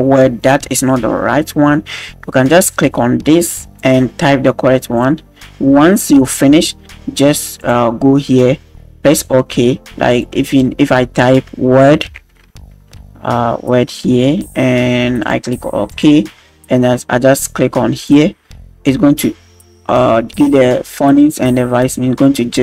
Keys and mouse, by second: 3.8-16.0 drag, 18.0-18.8 drag.